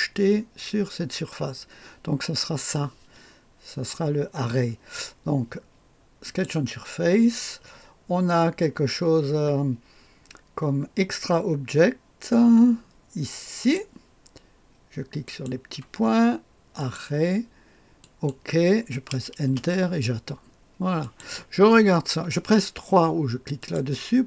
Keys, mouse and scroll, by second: 6.2 click, 11.2-12.0 scroll up 2, 13.5 click, 15.2 click, 16.7 click, 17.9 click, 19.4 Return, 20.9 click, 23.5 click.